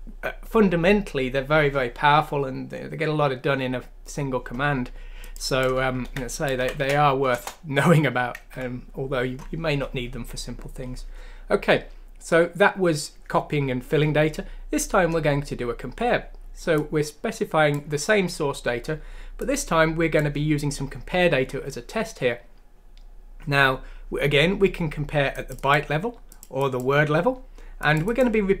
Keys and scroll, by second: 6.0 ctrl+c, 6.6 ctrl+f, 7.3 Return, 8.0 typing, 8.5 Escape.